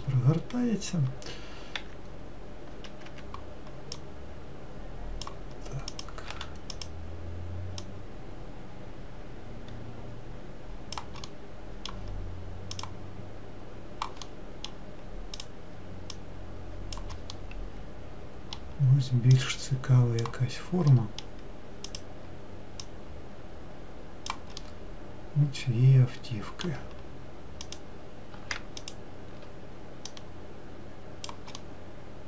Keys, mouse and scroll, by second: 2.3 e, 4.7 click, 6.5 click, 6.8 2, 7.4 click, 8.5 click, 11.8-13.3 middle drag, 13.3 click, 14.8-15.9 middle drag, 15.9 click, 16.7 click, 17.9-20.0 middle drag, 20.0 click, 21.6 middle click, 22.5 click, 23.5 click, 25.1-28.3 middle drag, 28.3 click, 30.8 click, 32.1-32.2 middle drag.